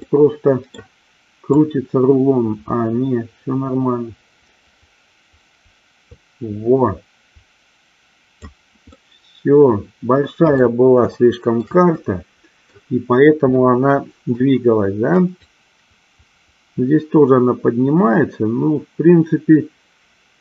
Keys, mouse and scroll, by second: 0.1 middle click, 1.7-8.5 drag, 9.1 scroll up 1, 9.2-10.6 middle drag, 10.6 scroll down 1, 11.2-11.6 shift+middle drag, 12.1 middle click, 15.6-20.4 drag.